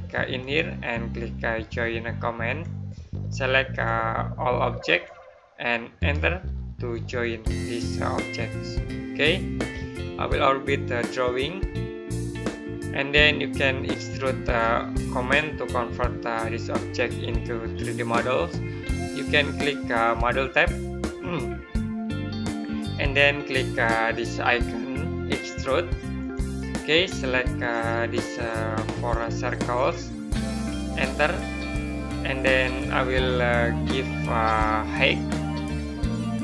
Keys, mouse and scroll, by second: 0.3 click, 5.8 right click, 10.0 middle click, 12.7 middle click, 20.4 middle click, 26.0 click, 30.8 right click, 31.8 click.